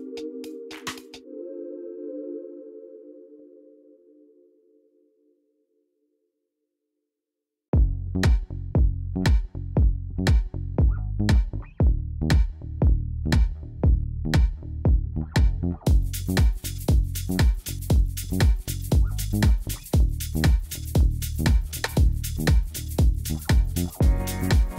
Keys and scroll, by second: 4.7 x, 6.6 shift+z, 19.3 i.